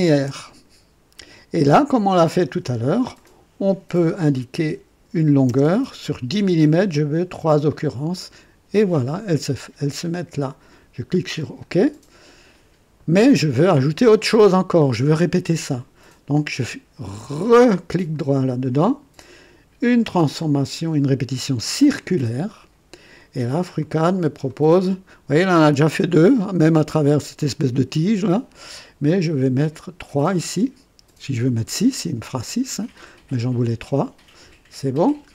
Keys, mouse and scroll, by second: 1.7-2.6 drag, 3.1 click, 4.6 KP_1, 5.4 KP_0, 7.1 scroll up 1, 11.3 click, 18.1 right click, 21.7 click, 23.8-24.6 drag, 25.4-27.1 drag, 27.4 click, 29.7 scroll up 2, 31.7-34.2 drag, 35.0-35.3 drag.